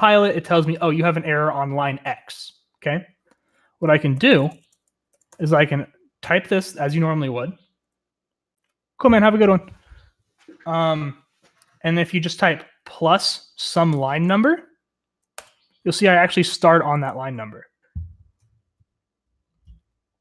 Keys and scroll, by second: 3.6-5.3 typing, 13.9 typing, 15.4 Return.